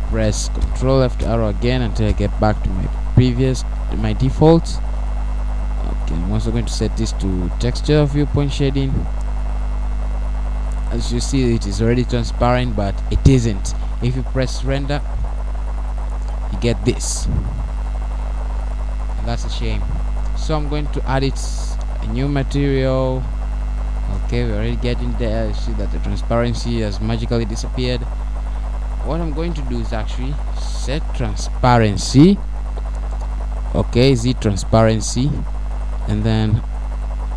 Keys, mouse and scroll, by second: 5.4 ctrl+Left, 10.0 click, 12.2 middle click, 13.1 middle click, 14.5-15.3 scroll up 3, 22.0 Escape, 22.0-22.3 scroll down 3, 24.1 click, 26.0 click, 27.3-27.7 scroll down 1, 32.6 scroll down 1, 34.6 click.